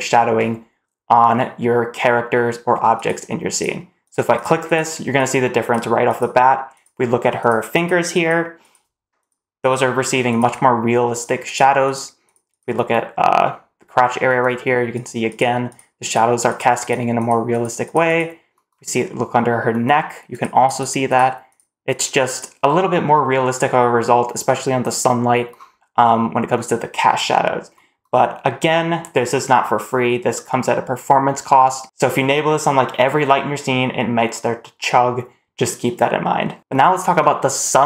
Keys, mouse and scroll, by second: 2.8 click, 3.4 click, 3.9 click, 4.5 click, 5.0 click, 5.5 click, 5.9 click, 6.6 click, 7.2 click, 8.0 click, 8.5 click, 9.0 click, 9.6 click, 10.1 click, 11.0 click, 11.7 click, 12.1 click, 12.3 click, 14.8 click, 15.5 click, 16.3 click, 16.6 click, 17.0 click, 17.7 click, 20.2 click, 20.9 click, 21.3 click, 21.7 click, 22.1 click.